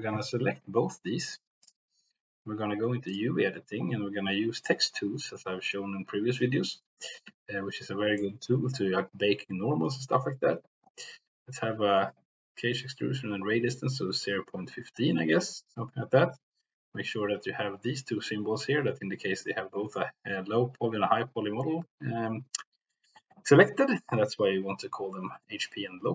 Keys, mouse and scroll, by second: 1.6 shift+click, 3.1 click, 8.2 shift+middle click.